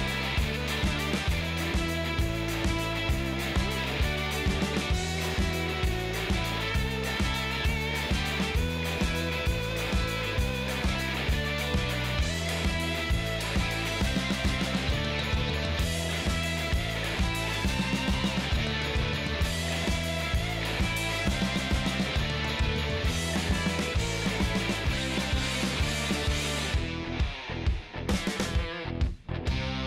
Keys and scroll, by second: 0.6 Return, 2.7 i, 3.3 Return, 16.0 ctrl+space, 16.9-18.4 typing.